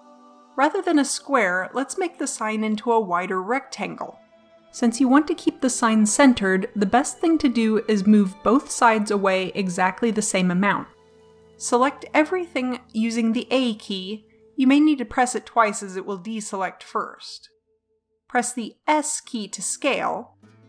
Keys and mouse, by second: 0.1 middle click, 12.0 a, 18.5 s.